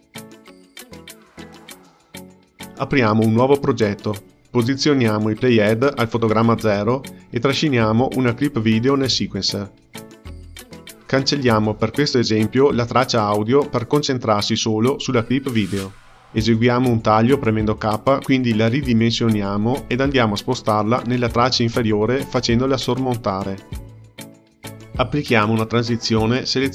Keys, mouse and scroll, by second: 0.0 scroll up 5, 0.3-3.4 drag, 3.8-6.6 drag, 8.0 click, 9.0 x, 10.7-12.3 ctrl+middle drag, 12.3-15.3 drag, 15.9 click, 17.2 k, 17.9 click, 18.4-22.0 drag, 22.4-25.3 drag, 25.3 shift+b.